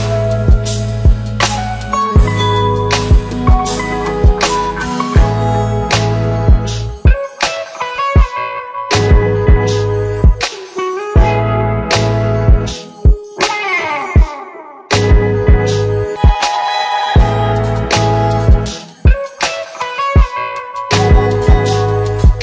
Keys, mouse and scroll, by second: 0.2 ctrl+d, 1.0-1.7 click, 8.3 click, 8.8 shift+click, 9.8 ctrl+d, 10.2-11.1 click, 13.9 Left, 14.6 Right, 16.6 click, 19.2 click, 20.7-22.4 click.